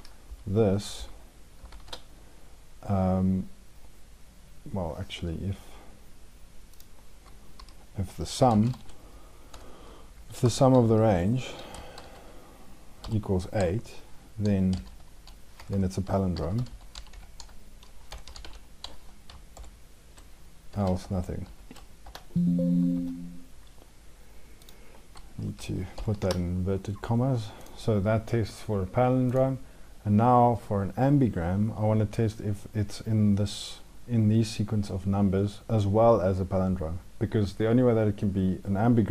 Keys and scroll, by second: 0.8 ctrl+Left, 1.5 ctrl+shift+Right, 9.9 ctrl+Right, 10.9 ctrl+Down.